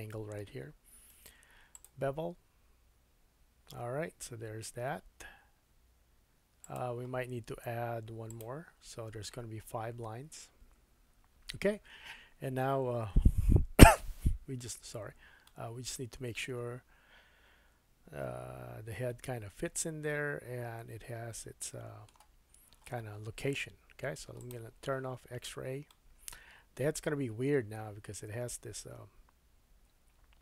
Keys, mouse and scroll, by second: 1.1-7.0 right drag, 7.0-11.4 drag, 15.4-18.6 middle drag, 24.4 click, 25.3-25.9 scroll up 2, 25.9 middle click.